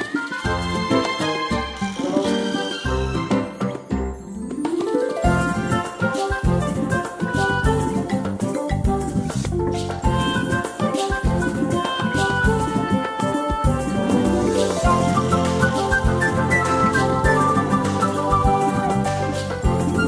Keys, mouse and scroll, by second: 0.7 click, 11.2 click, 12.3 ctrl+scroll up 1, 14.0 click, 15.0 shift+click, 19.9 click.